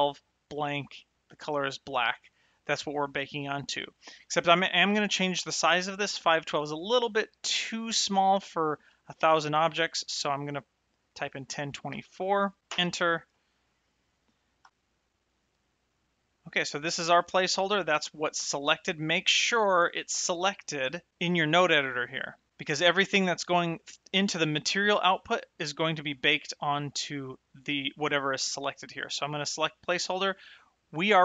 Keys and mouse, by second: 6.5 click, 11.3 KP_1, 11.4 KP_0, 12.7 Return, 12.7 KP_Enter, 14.9 n, 17.7 click, 20.5 click, 23.2 click, 26.1 click, 28.5 click.